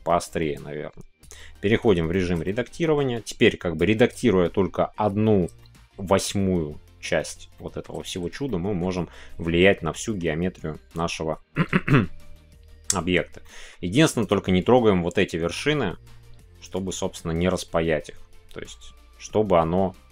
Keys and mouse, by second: 0.7 click, 1.6 Tab, 2.1 shift+middle click, 2.4 middle click, 3.7 click, 5.6 shift+middle click, 7.5 shift+middle click, 8.5 middle click, 9.6 middle click, 13.4 middle click, 14.2 click.